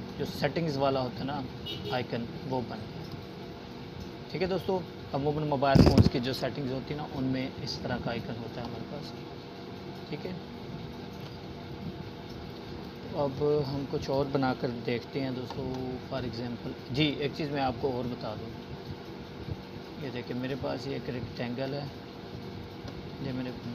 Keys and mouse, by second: 6.3-7.5 alt+shift+drag, 13.2 right click, 16.5-19.0 drag.